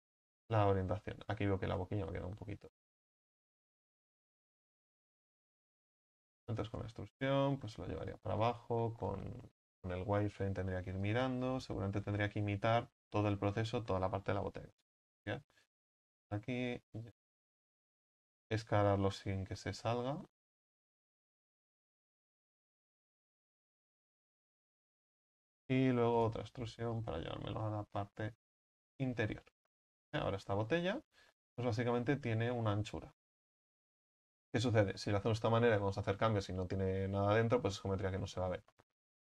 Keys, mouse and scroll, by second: 0.1 scroll up 2, 0.4 z, 1.6 ctrl+z, 2.7 ctrl+z, 3.8 s, 5.1-5.6 scroll down 4, 5.6 shift+middle click, 6.1 e, 7.3-8.3 drag, 8.3 z, 9.7 KP_1, 11.1-14.1 drag, 14.1 shift+middle click, 14.4-14.7 shift+scroll down 1, 14.7 e, 15.7-18.4 drag, 18.4 s, 24.8-25.3 scroll down 5, 25.3 shift+middle click, 26.1 e, 27.0-29.3 drag, 29.3 z, 29.7 middle click, 30.0 Tab, 30.4-31.0 middle drag, 31.0 Tab, 31.4 middle click, 32.0-33.2 scroll up 6, 33.2 Tab, 33.6-34.0 scroll down 3, 34.0 Tab, 35.2 ctrl+z, 35.5 ctrl+z, 35.7 ctrl+z, 35.9 ctrl+z, 36.1 ctrl+z, 36.3 ctrl+z, 36.6 ctrl+z, 36.8 ctrl+z, 37.1-38.3 ctrl+z, 38.7-39.2 middle drag.